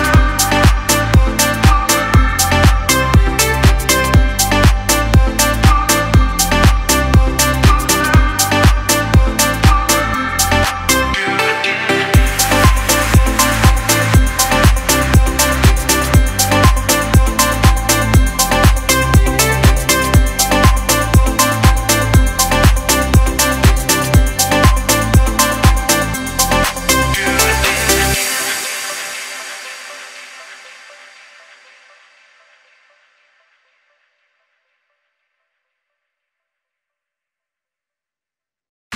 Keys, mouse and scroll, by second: 3.8-5.1 scroll up 1, 5.1 Return, 6.7 click, 7.4 space, 7.5 click, 7.9 space, 9.1 click, 13.2 click, 14.6 u, 15.4 click, 15.9-16.6 scroll up 1, 16.6 Return, 17.2 Return, 17.7 click, 18.5 alt+scroll down 1, 19.3 click, 19.5-22.0 typing, 19.7 click, 20.7 click, 21.7 click, 23.1 click, 26.2 alt+scroll up 1, 26.8 space, 27.0 click, 27.4 space, 28.5 click, 28.9 alt+scroll up 1, 30.0 click, 30.0-35.3 drag, 35.3 alt+scroll up 1, 36.6 click, 37.4 click.